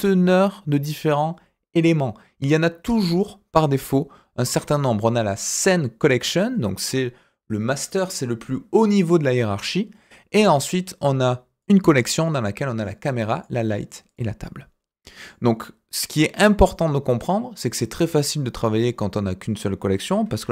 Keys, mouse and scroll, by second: 4.7 click, 11.6 click, 12.8 click, 13.3 click, 14.1 click, 15.2 click, 20.4 shift+a.